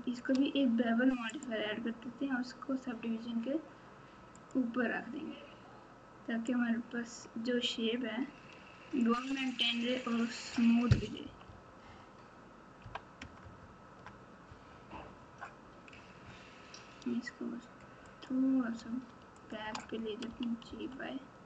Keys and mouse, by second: 1.4-4.5 drag, 6.4-9.0 drag, 11.2 KP_6, 11.4 KP_6, 11.8 KP_6, 12.8 KP_4, 13.2 KP_Add, 13.4 KP_Add, 18.0 click, 19.4 shift+click, 20.2 g.